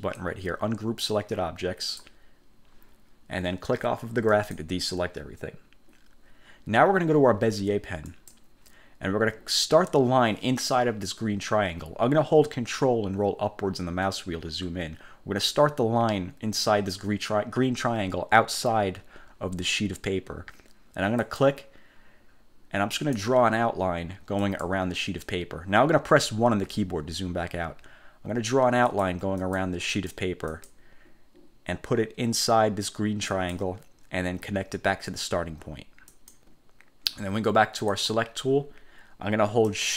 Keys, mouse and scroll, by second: 0.3-2.3 drag, 4.4 click, 8.2 click, 13.9-14.9 ctrl+scroll up 3, 21.3 click, 23.1 click, 24.5 click, 26.8 1, 29.0 click, 29.5 click, 30.1 click, 30.7 click, 33.5 click, 36.3 click, 38.0 click.